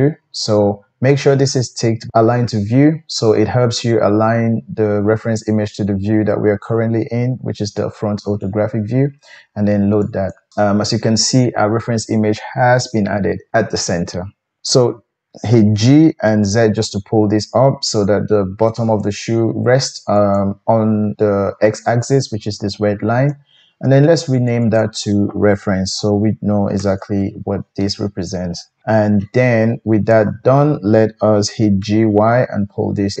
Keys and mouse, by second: 15.7 g, 20.4-24.4 middle drag, 24.4 click, 24.5 middle click, 24.6-33.2 drag, 31.8 g.